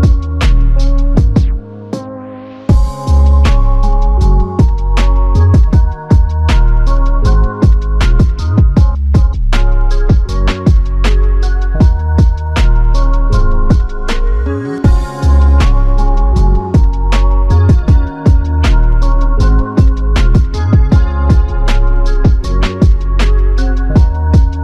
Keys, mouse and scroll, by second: 1.0 ctrl+alt+click, 2.0 ctrl+alt+click, 2.6 alt+click, 3.9 ctrl+alt+click, 7.2 f, 7.4 alt+click, 14.6 alt+click, 19.2 alt+click, 21.8 f, 22.6 click.